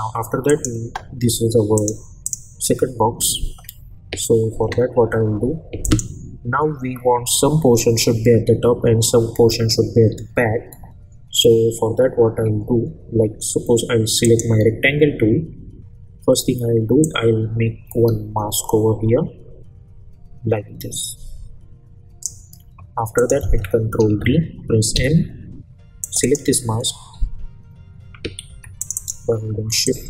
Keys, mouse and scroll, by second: 5.8 click, 14.2 click, 17.0-22.3 drag, 23.9 ctrl+d, 24.9 m, 26.0 click, 28.5 v, 28.8-30.0 drag.